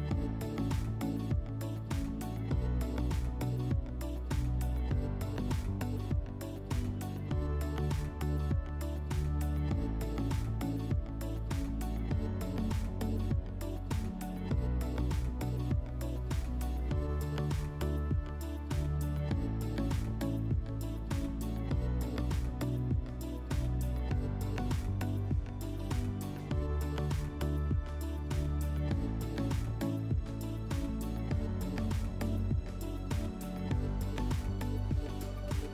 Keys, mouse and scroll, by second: 0.6 click, 3.3 click, 4.3 click, 6.4 click, 10.6 click, 11.3 click, 11.4 click, 11.6-13.7 typing, 13.2 Tab, 16.9-19.0 drag, 19.0-22.7 typing, 20.5 Tab, 21.7 Tab, 23.4 Return, 26.6 click, 32.8-34.0 middle drag, 34.0-35.7 drag.